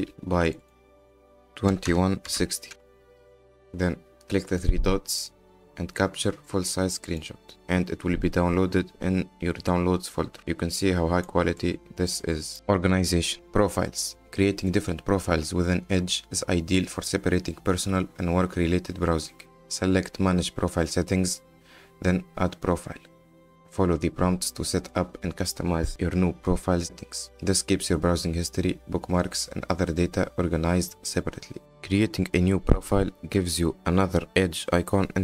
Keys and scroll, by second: 0.0 KP_5, 0.1 KP_0, 1.7 KP_2, 2.3 KP_6, 2.5 KP_0, 2.7 Return.